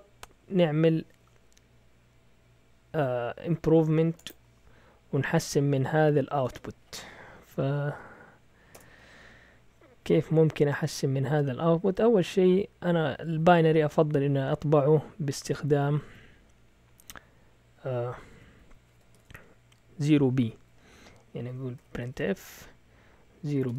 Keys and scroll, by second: 7.4 Up, 7.9-10.0 typing, 13.9 Up, 14.1 Up, 15.6 Right, 15.8 Right, 16.0 Right, 18.4 Right, 19.1 0, 21.5-23.7 typing.